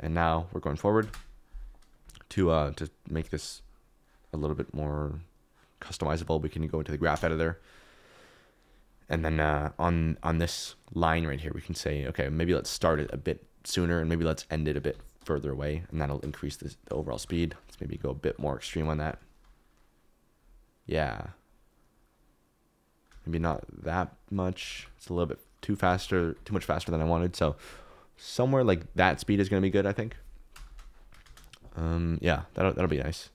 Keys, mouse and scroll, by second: 1.2 space, 2.3-3.4 drag, 7.1 click, 8.4 click, 8.9 ctrl+middle click, 10.1 ctrl+middle click, 12.0 click, 12.4 click, 12.7 g, 12.9 y, 14.2 click, 14.7 g, 14.9 y, 17.1-19.0 typing, 17.6 click, 18.0 click, 21.5 click, 23.3 g, 23.4 y, 24.3 click, 24.5 g, 24.7 y, 25.1 click, 26.2 shift+Left, 26.8 space, 30.6 space, 31.2 space, 32.7 space.